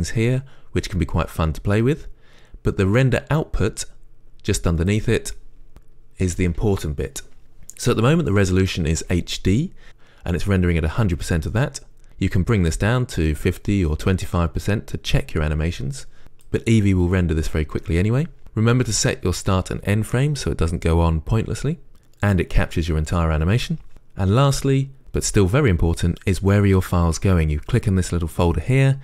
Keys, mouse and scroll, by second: 5.1 click, 12.5-29.0 drag.